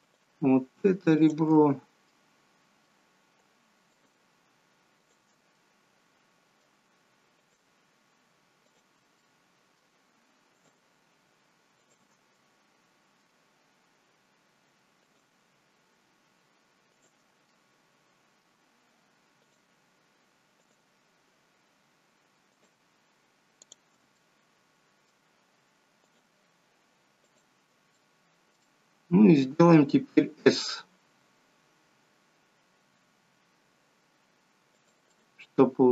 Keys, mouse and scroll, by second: 0.1 shift+click, 1.3 shift+click, 2.1 middle click, 4.0 shift+click, 5.1 shift+click, 5.6 middle click, 7.5 shift+click, 8.8 shift+click, 9.3 middle click, 10.6 shift+click, 11.9 shift+click, 12.5 middle click, 15.1 shift+click, 17.0 shift+click, 17.6 middle click, 19.5 shift+click, 20.8 shift+click, 22.6 shift+click, 23.6 shift+click, 24.3 middle click, 26.2 shift+click, 27.4 shift+click, 28.1 middle click, 28.8 middle click, 31.1 s, 35.2 middle click.